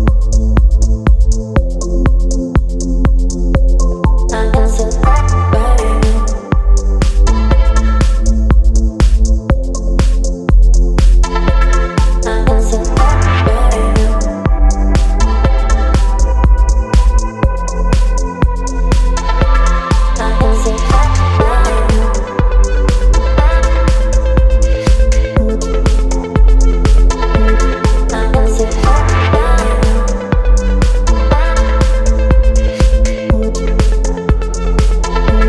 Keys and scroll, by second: 0.1 ctrl+t, 5.1 space, 10.3 Return, 11.8 space, 24.5 Return, 28.8 space.